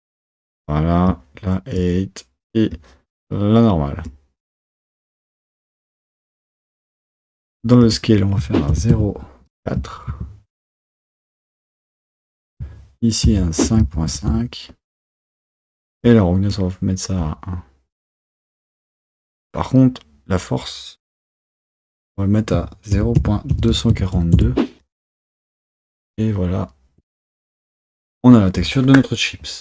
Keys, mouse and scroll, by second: 1.9-6.1 drag, 10.2-14.2 drag, 16.2-25.7 drag, 28.2 click.